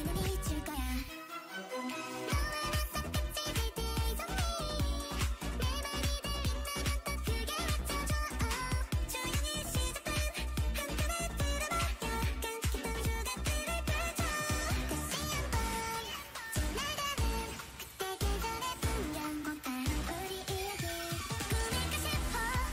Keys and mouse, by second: 0.9 right click, 1.6 Tab, 3.4 a, 3.8 a, 5.0 l, 6.7 h, 7.0 h, 9.0 ctrl+i, 11.7-19.2 drag, 19.2 shift+a, 22.0 click.